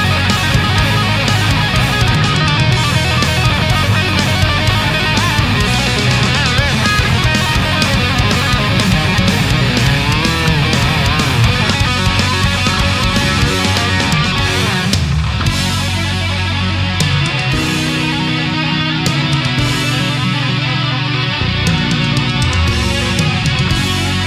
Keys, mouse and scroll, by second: 11.0 click, 12.7 shift+right click, 13.5 click, 15.0 click, 15.7 click, 16.5 click, 16.9 click, 17.5-19.0 drag, 19.7-21.2 drag, 21.5 ctrl+z.